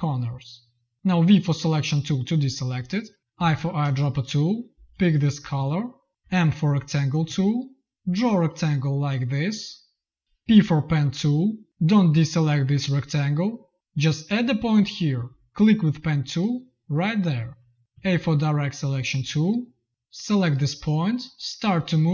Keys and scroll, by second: 1.1 v, 3.8 space, 6.1 m, 7.2 z, 7.9 m, 10.4 p, 17.8 a.